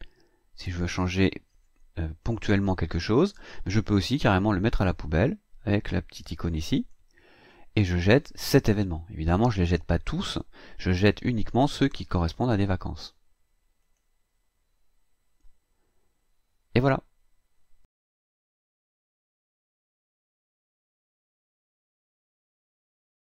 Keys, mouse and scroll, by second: 6.8 click, 13.8 click.